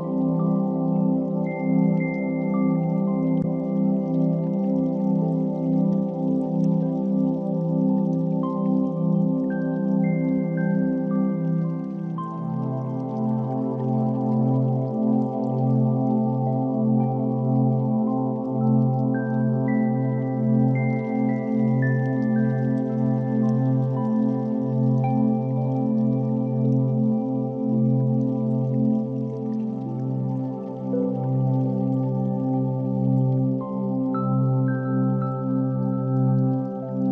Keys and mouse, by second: 3.2-5.3 shift+drag, 5.7 ctrl+a, 11.6 click, 13.0 ctrl+3, 14.3 click, 14.9-15.5 middle drag, 16.5 shift+click, 18.0 alt+right click, 20.5 click, 21.9 alt+click, 23.0 click, 23.8-27.2 middle drag, 30.0 KP_7, 30.3 shift+a, 36.3 alt+z.